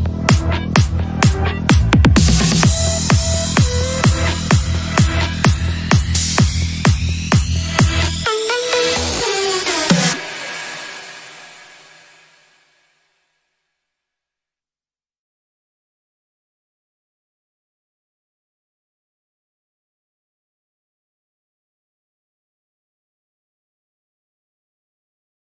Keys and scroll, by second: 3.4 shift+F2, 3.6 Escape, 8.0 g, 17.2 Delete, 17.3 shift+F2, 17.5 Escape, 20.8 F9, 25.0 ctrl+s.